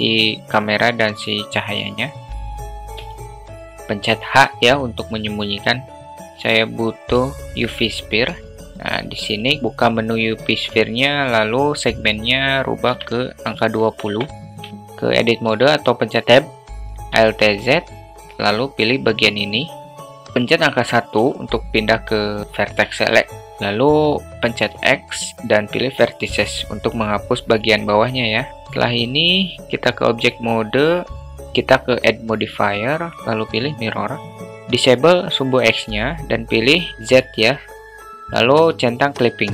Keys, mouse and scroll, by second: 3.5 h, 6.1 shift+a, 9.6 click, 12.6-14.8 drag, 16.0 Tab, 17.7 alt+z, 19.4 click, 21.7 1, 25.3 x, 29.7 Tab, 32.9 click, 33.1-34.4 drag, 36.1 click, 37.6 click.